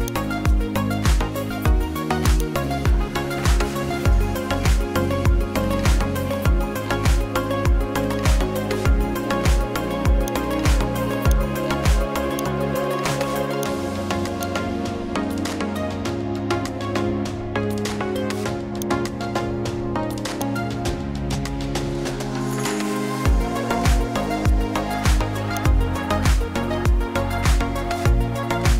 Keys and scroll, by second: 3.8 o, 5.1 r, 5.5 d, 6.9-9.2 typing.